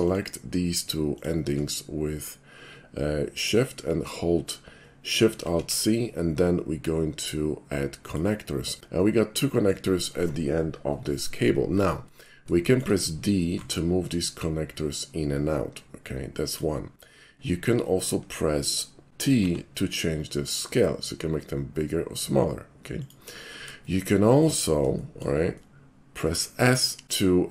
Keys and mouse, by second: 0.0 shift+click, 1.1 shift+click, 1.8 shift+middle click, 5.5 alt+shift+c, 8.1 click, 8.8-9.7 middle drag, 12.1 middle click, 12.7 shift+middle click, 13.6 d, 16.5 click, 19.5 t, 23.0 click, 23.9 shift+middle click, 25.0-26.1 shift+middle drag, 27.0 s.